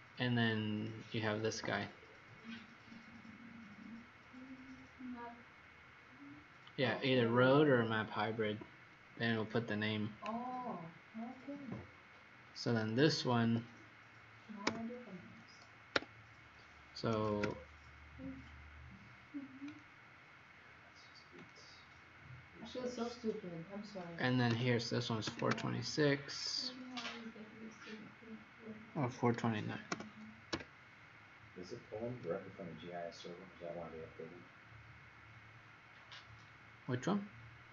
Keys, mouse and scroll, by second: 9.1 Escape, 10.9-11.3 scroll down 2, 12.5 click, 13.4 Escape, 14.6 Return, 15.9 Escape, 16.8-17.8 typing, 19.6 click, 24.4-25.9 typing, 29.8-30.5 typing, 33.0 click, 35.8-37.1 scroll up 4, 37.1-37.7 scroll down 3.